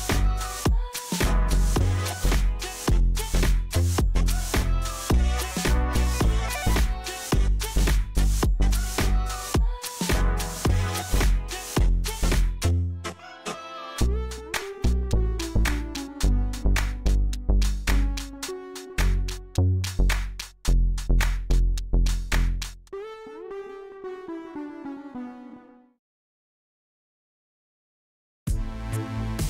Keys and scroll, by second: 5.6 Tab, 6.4 a, 7.3 shift+z, 8.2 e, 9.9 a, 12.3 ctrl+KP_3, 12.8 shift+z, 15.3 r, 17.8 shift+z, 19.8 Tab, 21.8 Tab, 26.5 Delete, 27.6 Tab, 28.8 3.